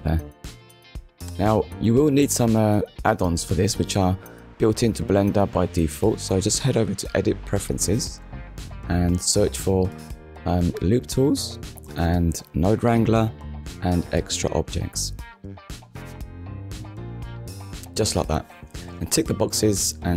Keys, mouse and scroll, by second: 0.7 click, 3.2 click, 4.1 click, 6.4 click, 7.3 click, 8.3 click, 10.7 click, 15.4 click, 16.8 n, 16.9 o, 17.1 d, 19.7 click.